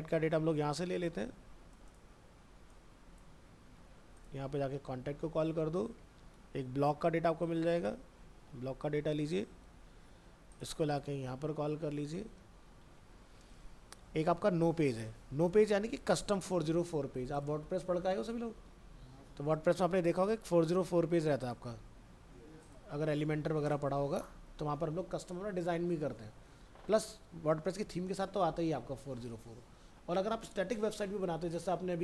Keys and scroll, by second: 3.3 ctrl+c, 3.8 alt+Tab, 4.4 ctrl+v, 4.8 ctrl+s, 5.4 ctrl+w, 6.0 alt+Tab, 8.1 ctrl+c, 8.5 alt+Tab, 11.2 ctrl+v, 12.3 ctrl+s, 12.9 alt+Tab, 16.3 ctrl+c, 16.9 alt+Tab, 18.0 ctrl+s, 18.4 ctrl+w, 23.0 ctrl+v.